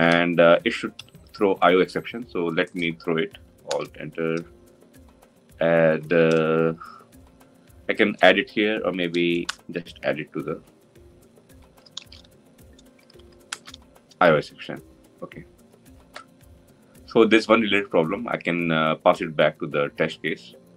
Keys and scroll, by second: 3.5 alt+Return, 11.7 alt+Return.